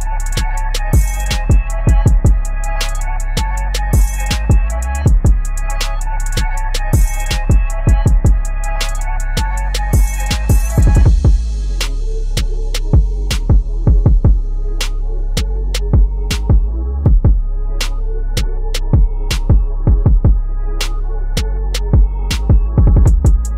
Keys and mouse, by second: 1.1 click, 3.0 click, 4.8 typing, 7.8-10.5 drag, 10.5 Right, 12.5 t, 13.6 u, 14.7-16.6 drag, 16.6 shift+a, 16.9 click, 18.0 -, 19.2 ctrl+z, 20.7 click, 21.8 =.